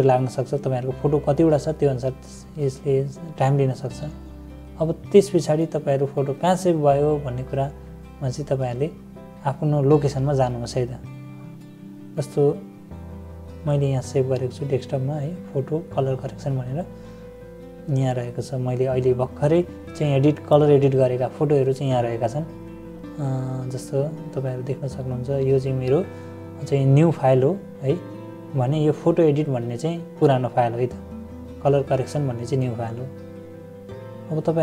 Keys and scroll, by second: 15.5 =, 16.4 -.